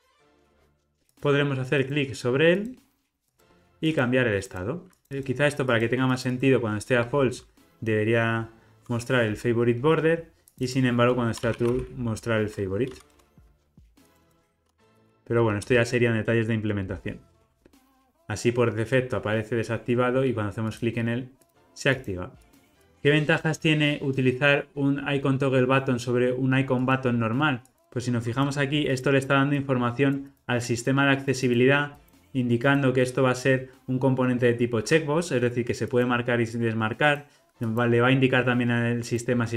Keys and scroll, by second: 5.1 super+z, 13.1 Return, 16.9 ctrl+r, 22.9 alt+super+[.